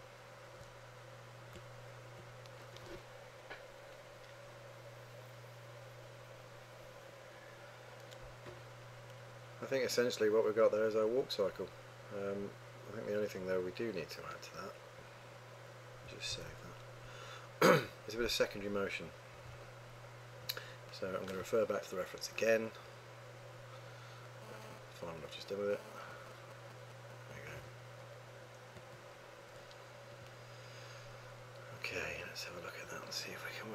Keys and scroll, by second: 16.4 super+s.